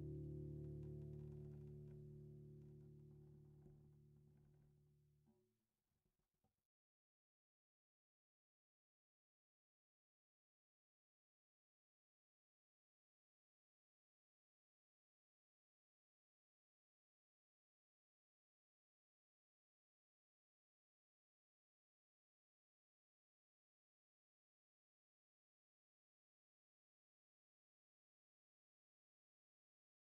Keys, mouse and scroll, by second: 0.4-3.7 right drag, 1.5-3.7 drag, 3.8-4.8 right drag, 3.9 x, 5.8-10.5 middle drag, 10.5 KP_5, 10.9 KP_1, 11.9 KP_3, 13.0 Tab, 14.3-16.7 drag, 18.0-20.9 drag.